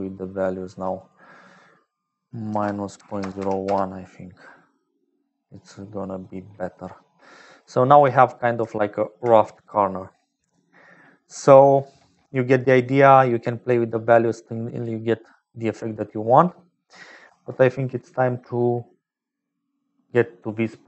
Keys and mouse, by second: 0.0-20.8 typing, 1.1-4.2 drag, 5.5 click, 6.9 click, 12.6 middle click, 13.2 click, 15.1 middle click, 17.2 ctrl+s.